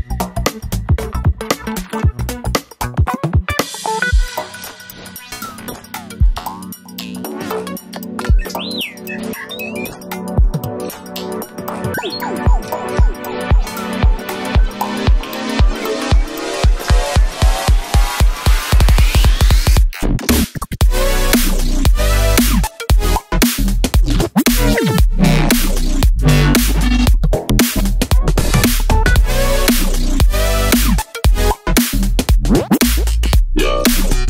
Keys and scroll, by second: 14.4 super+c, 14.5 super+v, 23.4 BackSpace, 23.8 super+c, 23.8 super+v, 32.8 super+c, 32.9 super+v.